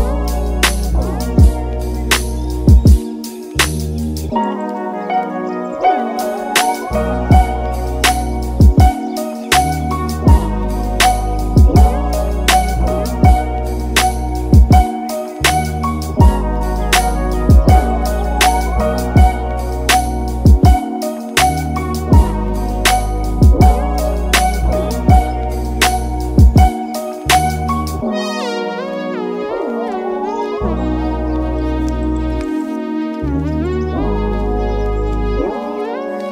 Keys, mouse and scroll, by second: 8.1 click, 8.7-16.8 drag, 16.8 Delete, 18.0 click, 27.1 click, 28.8 click, 34.9-36.3 drag.